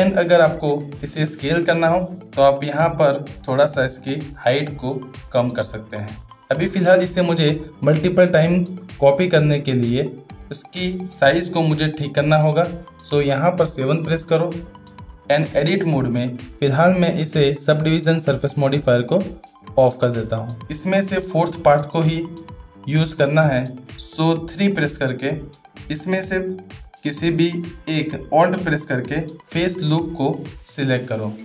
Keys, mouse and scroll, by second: 0.7-2.1 middle drag, 3.4 space, 3.5-6.4 drag, 13.9 KP_7, 15.5 Tab, 18.8 click, 25.2 shift+3, 25.3 shift+middle click.